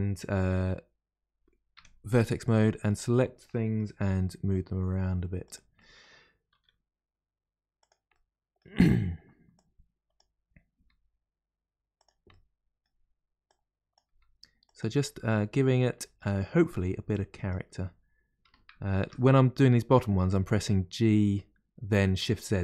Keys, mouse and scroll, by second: 1.7 1, 2.4 click, 3.0 click, 3.5 middle click, 4.1 g, 5.7 middle click, 6.5 r, 8.1-9.5 middle drag, 9.5 click, 10.1 click, 10.7 g, 12.3-13.4 middle drag, 13.4 click, 14.0 g, 15.0 middle click, 15.6 scroll down 1, 15.9-17.1 shift+middle drag, 17.1 click, 18.4 g.